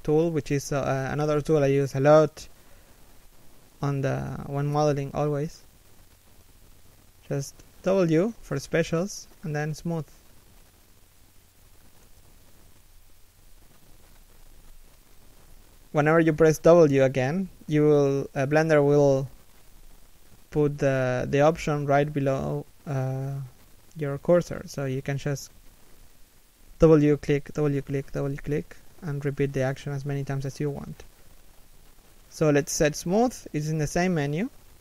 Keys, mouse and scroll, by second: 0.7 a, 1.0 alt+right click, 1.8 scroll down 1, 2.2 middle click, 8.4 w, 16.8 middle click, 17.4 z, 19.9 alt+right click, 20.4 middle click, 20.9 z, 21.0 middle click, 21.7 alt+shift+right click, 22.0 3, 22.4 1, 22.8 w, 24.4 scroll down 1, 24.7 middle click, 26.7 middle click, 27.1 a, 30.4 KP_3, 30.9 KP_1, 32.2 w.